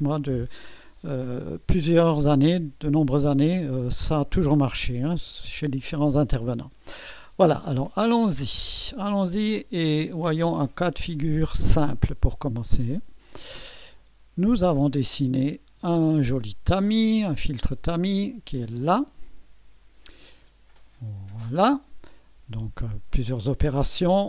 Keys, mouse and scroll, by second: 9.0 click, 10.9 click, 12.9 click, 14.6 click, 18.7-20.5 drag.